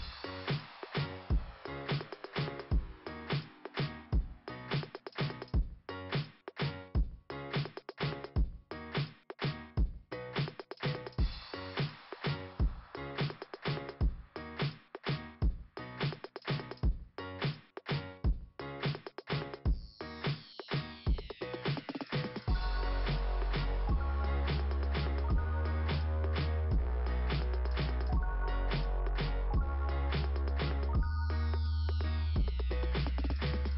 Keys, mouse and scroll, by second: 2.9 scroll up 2, 4.3 click, 11.4 scroll up 2, 15.4 scroll down 2, 17.3 click, 18.3 click, 18.4 click, 19.3 click, 19.4 click, 19.5 click, 19.6 click, 24.8 click, 24.9 click, 25.1 click, 25.1 click, 26.9 click, 27.0 click, 27.6-27.9 scroll up 2, 33.3 click, 33.4 click.